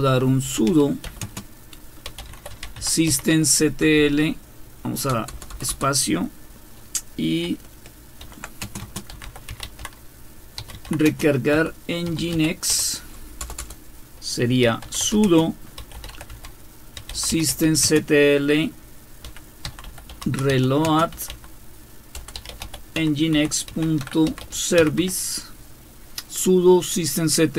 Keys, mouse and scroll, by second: 0.0-5.7 typing, 8.2-25.5 typing.